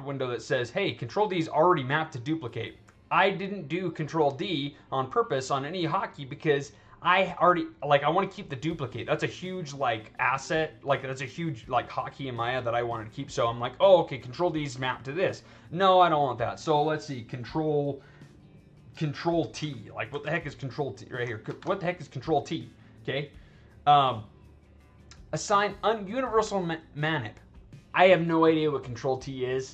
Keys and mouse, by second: 15.3 click, 20.0 ctrl+t, 20.9 click, 21.4 ctrl+t.